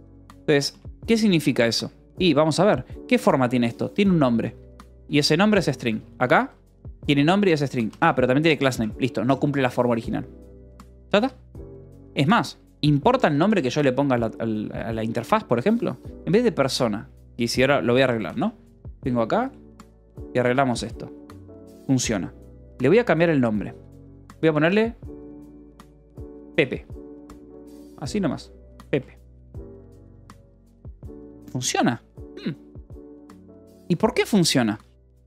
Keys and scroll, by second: 1.0 shift+v, 1.2 Escape, 1.9 k, 2.7 v, 4.0 e, 4.4 Escape, 4.6 l, 5.0 v, 5.6 Escape, 5.8 j, 7.2 Escape, 7.6 j, 8.4 shift+v, 8.5 Escape, 11.1 k, 12.3 k, 12.9 c, 13.0 Escape, 13.6 k, 14.8 j, 15.5 l, 17.8-19.7 typing, 20.2 Escape, 21.1 ctrl+s, 23.4-24.4 typing, 25.5 shift+p, 25.9 BackSpace, 26.4 Escape, 27.3-29.6 typing, 29.9 Escape, 30.7 ctrl+s, 34.3-35.2 typing.